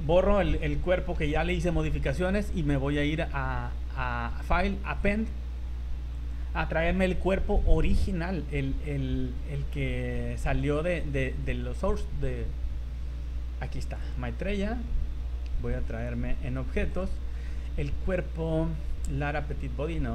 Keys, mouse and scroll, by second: 0.3 scroll down 3, 0.9 shift+middle click, 3.0 click.